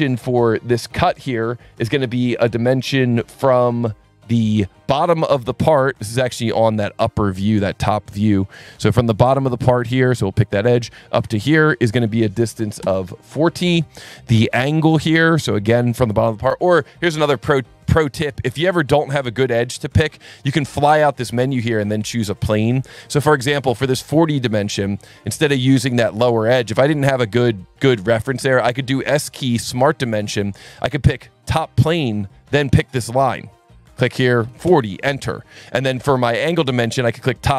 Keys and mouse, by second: 10.1 click, 11.3 click, 11.8 click, 12.5 KP_4, 12.6 KP_0, 12.9 KP_Enter, 15.3 click, 21.0 click, 23.3 Escape, 24.1 click, 24.4 Delete, 25.2 Escape, 25.6 click, 26.3 click, 27.4 click, 28.4 s, 29.8 click, 31.4 click, 32.8 click, 33.6 click, 34.4 KP_4, 34.7 KP_Enter, 34.7 KP_0, 35.6 click, 37.1 click.